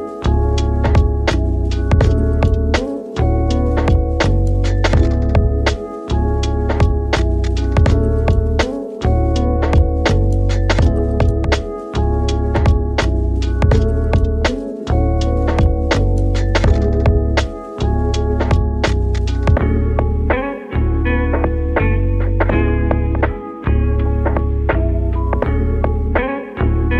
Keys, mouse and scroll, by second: 3.4 click, 4.2 middle click, 4.7 e, 5.7 click, 7.0 middle click, 7.8 click, 8.5 shift+click, 9.3 click, 10.3 click, 11.0 shift+click, 11.7 click, 14.0 ctrl+r, 16.2 click, 16.8 shift+click, 17.3-18.3 middle drag, 18.3 click, 19.8 click, 20.5 click, 21.5 shift+click, 23.9 click, 24.4 shift+click, 25.2 click, 26.4 click.